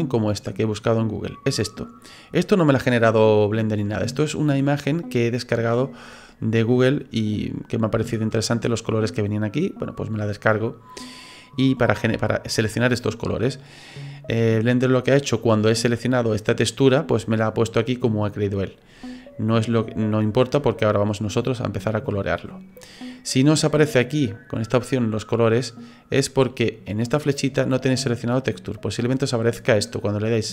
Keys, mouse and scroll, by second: 1.3-3.5 scroll down 3, 1.8-3.5 scroll up 1, 24.6 click, 27.0 click.